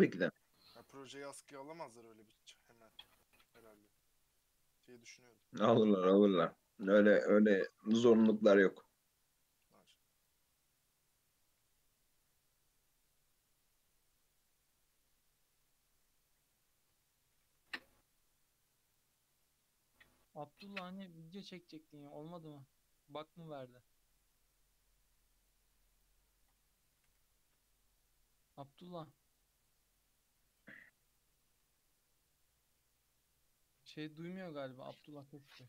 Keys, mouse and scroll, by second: 0.6 click, 1.8-2.6 scroll up 3, 2.6 e, 3.8 g, 10.2-11.6 drag, 17.3 g, 19.9 click, 27.0 g, 30.5 click, 31.4-32.2 scroll down 3, 31.6 alt+z, 32.2-34.6 middle drag, 34.6 KP_3, 35.6 shift+middle drag.